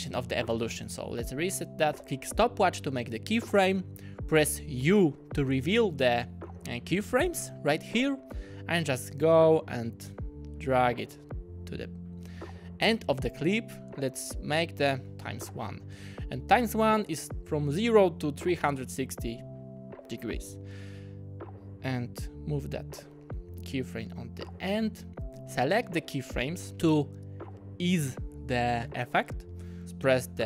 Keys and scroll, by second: 1.1 0, 1.6 Return, 4.8 u, 15.1 0, 16.0 Return.